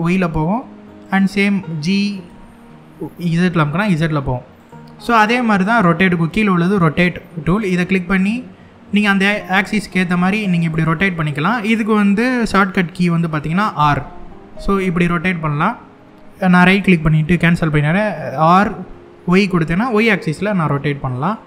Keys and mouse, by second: 0.7-1.9 right drag, 2.0 g, 2.6 z, 4.3 right click, 7.2 click, 8.8-10.4 drag, 13.4 r, 16.4 right click, 17.5 r, 19.2 y, 20.8 right click, 21.4 t.